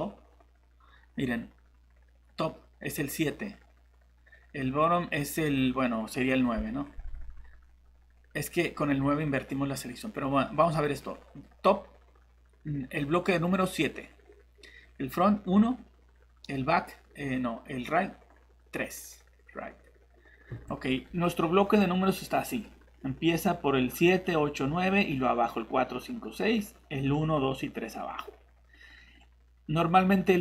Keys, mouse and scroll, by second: 20.5 shift+Escape.